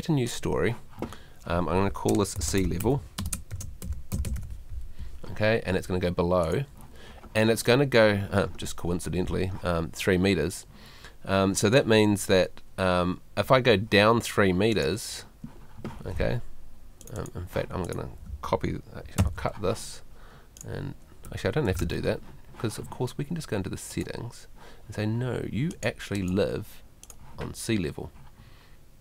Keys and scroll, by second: 21.3 Escape.